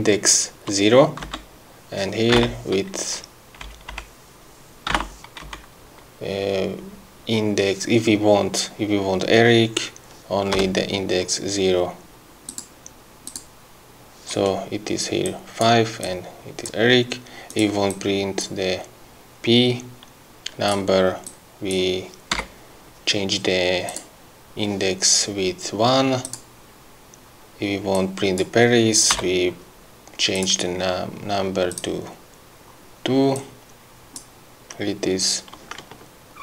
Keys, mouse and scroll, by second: 1.3 Down, 3.8 BackSpace, 5.6 Left, 10.7 0, 12.6 click, 13.4 click, 15.3 click, 16.1 click, 18.1 click, 20.9 click, 21.5 click, 22.6 1, 24.1 click, 26.4 click, 28.1 click, 29.3 2, 30.5 click, 31.9 click, 33.5 click, 36.3-36.4 ctrl+scroll up 4.